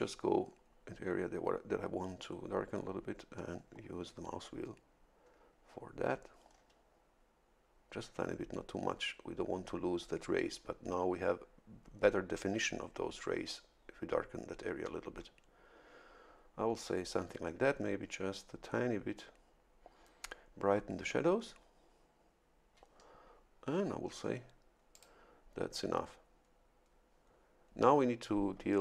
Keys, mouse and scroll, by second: 3.4-3.9 scroll down 1, 4.7-5.6 scroll down 2, 6.6-6.9 scroll down 2, 8.0 scroll down 2, 14.1-14.4 scroll down 2, 21.1-21.8 scroll up 2, 24.9 click.